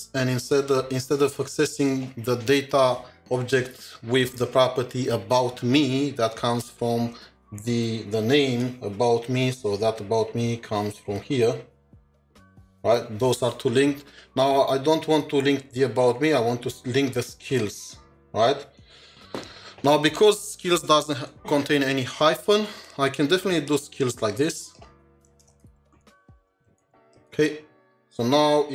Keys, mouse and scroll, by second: 8.5 typing, 8.6 ctrl+shift+4, 19.4 ctrl+shift+4, 19.9 ctrl+shift+2, 25.3-26.0 typing, 27.0 typing.